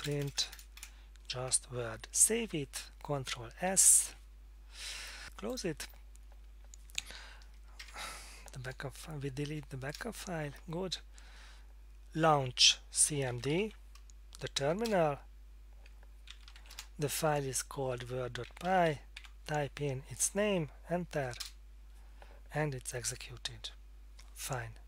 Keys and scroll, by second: 0.0-0.5 typing, 3.7 ctrl+s, 9.5 F8, 9.9 Return, 13.2-14.1 typing, 14.8 Return, 16.1-17.1 typing, 18.2-19.4 typing, 21.4 Return.